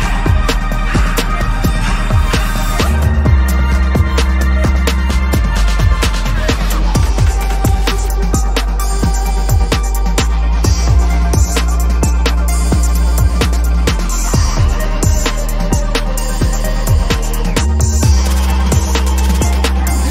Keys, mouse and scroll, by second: 0.6 alt+click, 0.8 double click, 1.3 ctrl+=, 1.5 ctrl+right click, 5.2 alt+click, 10.8 double click, 17.0 ctrl+=, 17.3 ctrl+=, 17.6 ctrl+=, 17.9 space, 18.8 ctrl+=, 19.0 ctrl+=, 19.2 space.